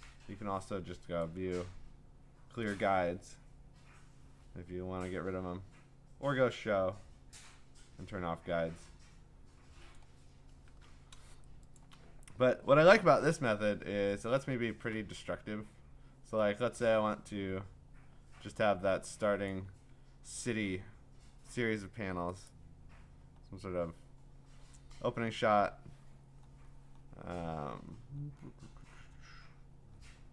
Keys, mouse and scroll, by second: 1.2 click, 9.9 click, 11.6 click, 11.8 click, 13.0 m, 13.9-14.6 scroll, 19.5 click, 21.3 scroll, 21.3 scroll down 5, 22.5 click, 23.4-25.8 scroll down 16, 25.4-25.8 scroll up 4, 25.8-26.2 scroll down 7, 26.2-26.9 scroll up 12, 27.6-27.9 scroll down 4, 27.9-29.0 scroll up 14, 29.0-29.8 scroll, 30.0-30.3 scroll.